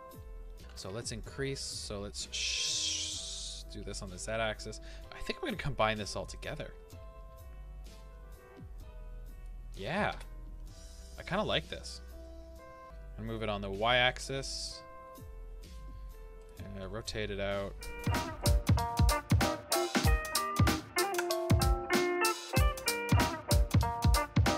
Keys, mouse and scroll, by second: 2.7 s, 4.0 click, 5.3 r, 6.3 click, 12.2-16.4 middle drag, 12.8 g, 16.4-18.3 drag, 16.8 r, 18.3-20.8 shift+middle drag, 20.6-22.8 typing, 20.8 click, 22.3 click, 22.6 click, 22.9 scroll, 23.0-23.8 middle drag, 23.5 scroll, 23.8 r.